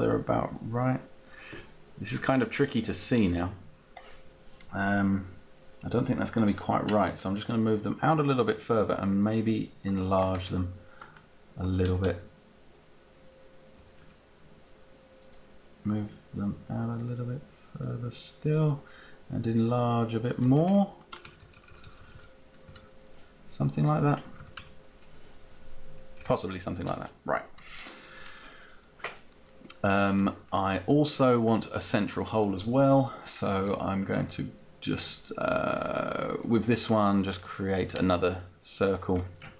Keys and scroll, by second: 10.4 shift+Up, 11.4 Up, 13.6 Down, 20.6 shift+Up, 22.3 Down, 24.5 Down, 26.4 Up.